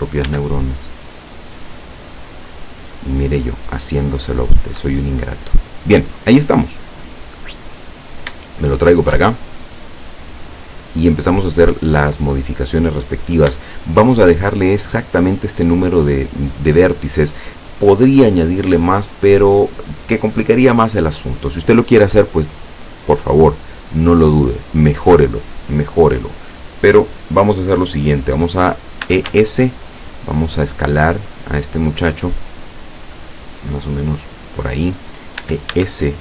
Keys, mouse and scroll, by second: 0.3 s, 2.6 click, 5.5 middle click, 7.1 click, 7.9-8.6 scroll up 1, 8.6-12.8 shift+middle drag, 13.7 shift+middle click, 29.1 e, 29.3 s, 34.5 click, 35.5 e, 35.8 s.